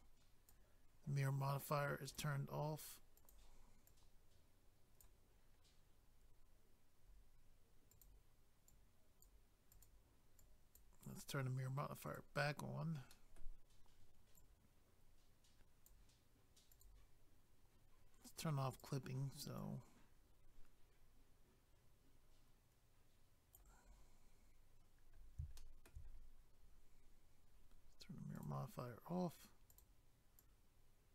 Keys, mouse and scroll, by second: 2.1 click, 2.1 click, 3.2 click, 3.3 click, 3.9 click, 5.4 scroll down 1, 7.0 scroll up 1, 7.9 click, 8.0 click, 8.5 click, 8.7 click, 9.7 click, 9.8 click, 10.4 click, 12.1 click, 13.1 middle click, 14.4 click, 16.7 click, 16.8 click, 18.7 click, 18.8 click, 19.6 click, 23.9 scroll up 1, 25.5 shift+middle click, 26.1 scroll up 1, 28.4 click, 28.4 click, 29.7 click, 29.8 click, 30.4 click.